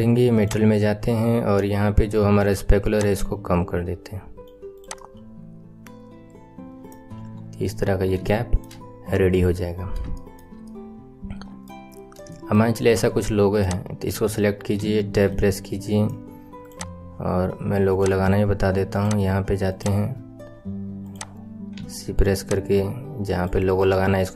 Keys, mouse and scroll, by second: 0.3 click, 1.1-1.9 scroll down 3, 1.9-2.8 scroll down 1, 2.8-4.8 drag, 4.9-7.1 middle drag, 7.1 KP_1, 7.6 scroll down 4, 8.3 shift+middle click, 9.1-10.1 scroll up 4, 10.1-11.9 shift+middle drag, 11.9-12.3 scroll down 3, 12.3-13.5 right drag, 13.5 click, 14.0-14.3 scroll up 4, 14.8 Tab, 15.3 right click, 15.3 shift+middle click, 16.6 click, 17.9-19.8 drag, 21.0 click, 21.7 c.